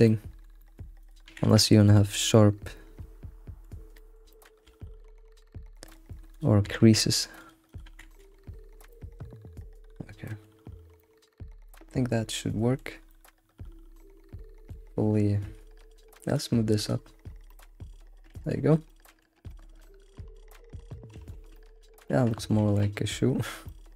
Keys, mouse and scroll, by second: 1.0 click, 1.2 g, 2.2-4.4 middle drag, 4.6 alt+x, 4.8-5.2 middle drag, 5.2 scroll up 1, 5.3-6.3 middle drag, 6.3 click, 6.6 g, 7.7 click, 7.9 g, 8.4-8.9 scroll down 6, 8.9-10.6 middle drag, 10.6-11.0 scroll up 4, 11.0-15.1 middle drag, 16.3 click, 17.5-21.1 middle drag, 21.1 alt+shift+z, 21.3 scroll down 2, 21.5-22.6 middle drag, 22.6 ctrl+s, 22.8-23.9 middle drag.